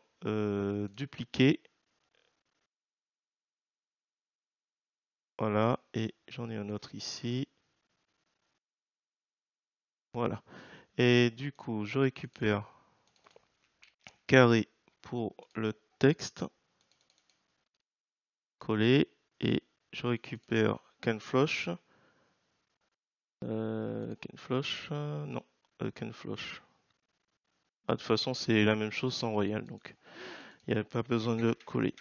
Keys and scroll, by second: 13.8 ctrl+c, 18.0 ctrl+v, 21.4 ctrl+c, 31.4 BackSpace.